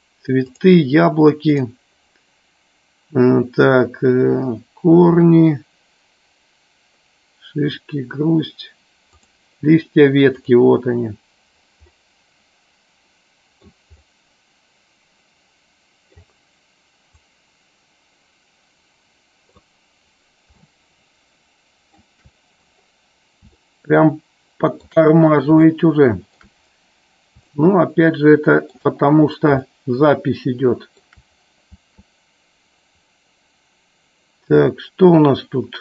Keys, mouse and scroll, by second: 12.3-14.2 middle drag, 14.6-16.9 middle drag, 17.6-20.5 drag, 21.4-22.8 shift+middle drag, 23.6-24.9 shift+middle drag, 25.6 scroll up 1, 25.8 shift+middle click, 26.4 scroll down 1, 27.5-28.8 shift+middle drag, 29.6-31.1 shift+middle drag, 34.6 middle click.